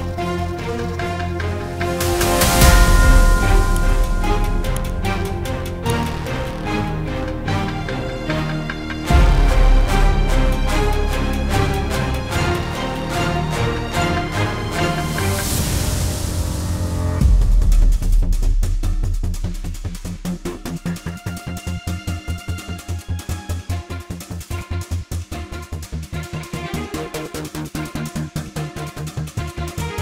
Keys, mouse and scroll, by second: 1.4 ctrl+o, 2.7-3.0 scroll down 1, 3.0 click, 3.8 click, 8.6 F2, 9.7 F4, 10.9 click, 11.9 F9, 13.9 click, 15.8 ctrl+o, 17.3 click, 17.9 click, 21.5 F2, 23.0 F4, 24.4 F9, 27.7 click, 28.9-29.4 scroll down 1.